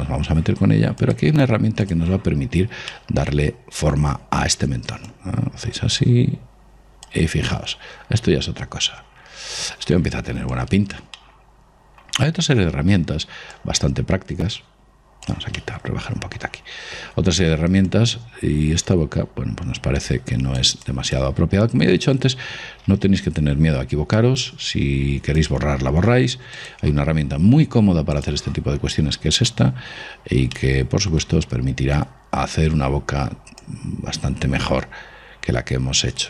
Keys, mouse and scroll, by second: 1.4-3.0 drag, 3.3-5.1 middle drag, 5.4 click, 7.8-9.7 middle drag, 10.9 click, 11.5-13.2 middle drag, 13.9 click, 15.9-18.2 middle drag, 18.2 click, 18.5-19.9 middle drag, 21.2 click, 23.3 ctrl+z, 24.6 click, 26.9 click, 29.2 middle click, 30.5 middle click, 30.9-32.6 middle drag, 34.0 click.